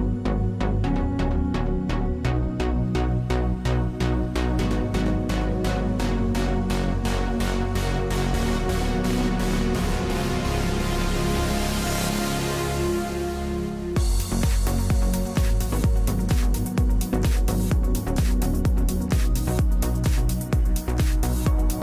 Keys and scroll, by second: 0.7 4, 5.8 Delete, 9.1 ctrl+Delete, 15.9 5.